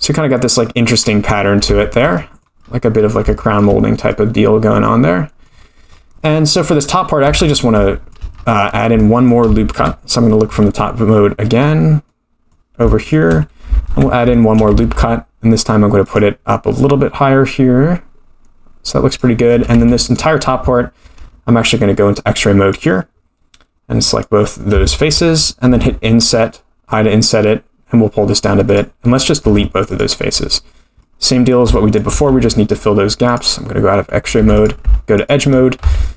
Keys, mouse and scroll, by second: 0.4-1.0 middle drag, 0.4-1.0 scroll down 5, 1.4 scroll down 2, 1.8 shift+middle drag, 2.1 middle click, 2.6-3.4 scroll up 10, 3.4 shift+middle click, 4.1-5.4 middle drag, 5.6-6.1 scroll down 12, 6.2-6.6 middle drag, 7.3 Tab, 7.8 shift+middle click, 8.4-8.9 scroll up 7, 9.0 shift+middle click, 9.8 KP_7, 10.4-10.8 scroll down 1, 11.6 scroll down 2, 12.9 shift+middle click, 14.5 middle click, 14.8 ctrl+r, 19.7 3, 20.1 click, 21.8-22.7 scroll down 4, 22.7 click, 24.0 click, 25.7 i, 29.4 x, 31.0 middle click, 31.7 shift+scroll up 1, 31.7 shift+middle click, 33.2 click, 34.3 2, 34.5 click, 35.1 shift+click, 35.8 f.